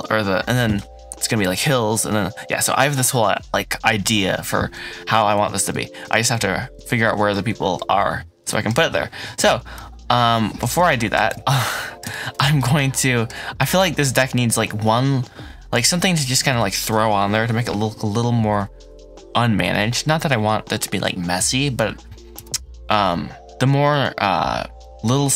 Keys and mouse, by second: 7.7 ctrl+s, 8.4 middle click, 9.7-10.5 middle drag, 10.8 shift+middle drag, 11.4 ctrl+s, 12.0 shift+middle drag, 12.5-13.2 middle drag, 13.5-13.9 middle drag.